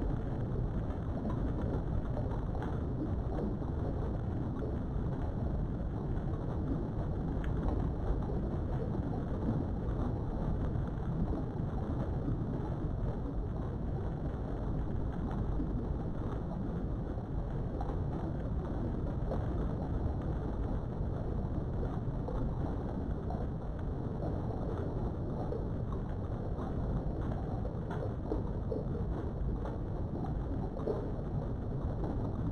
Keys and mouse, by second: 2.2 Tab, 2.5-4.6 middle drag, 4.7 Tab, 5.1 middle click, 5.9 KP_3, 7.8 ctrl+r, 10.0 right click, 10.5 middle click, 12.7 click, 13.2 middle click, 14.9 click, 16.2 shift+click, 17.1-19.7 typing, 19.1 right click, 20.5 click, 20.9 Tab, 20.9 q, 22.6-23.9 middle drag, 23.9 Tab, 24.4 middle click, 25.1 KP_3, 26.4 click, 28.2 k.